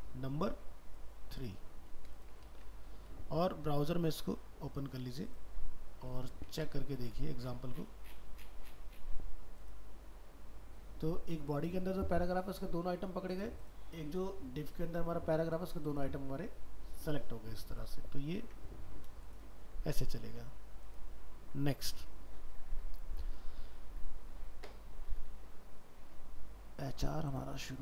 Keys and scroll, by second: 2.5 ctrl+s, 6.7 ctrl+w, 18.5 ctrl+w.